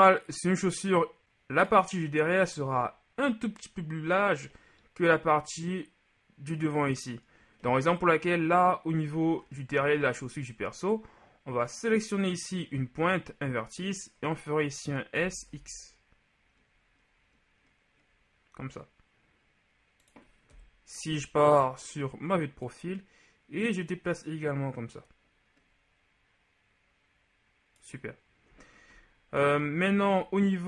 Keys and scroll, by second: 15.4 s, 15.6 x, 20.6 KP_3.